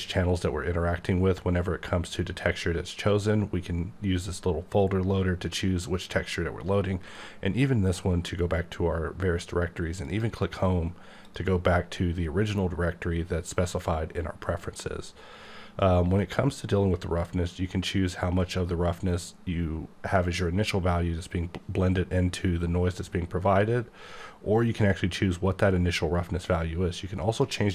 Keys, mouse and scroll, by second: 4.2-6.3 scroll up 4, 7.1-7.8 scroll up 7, 7.8-9.6 scroll down 3, 10.0 click, 11.2 click, 12.9-14.7 scroll down 1, 27.3 click.